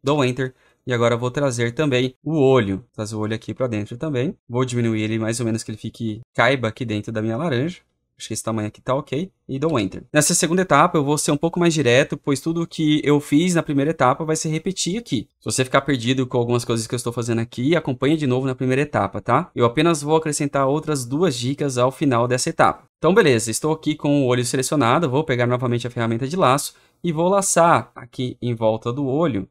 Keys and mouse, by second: 1.6 click, 2.8 click, 5.0 click, 7.5 alt+click, 8.8 click, 9.5 Return, 26.0 click.